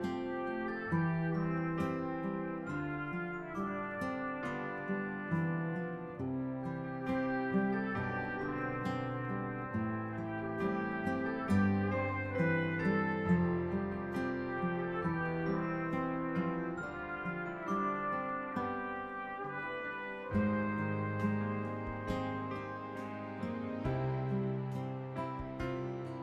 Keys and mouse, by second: 0.0-0.1 typing, 2.1 click, 2.6 ctrl+d, 4.2 click, 4.6-5.9 typing, 6.7 click, 7.2 ctrl+d, 8.7 click, 9.0-10.3 typing, 11.4 click, 15.2 click, 16.1 click, 19.4 click, 20.4 click, 23.9 click, 24.9 click.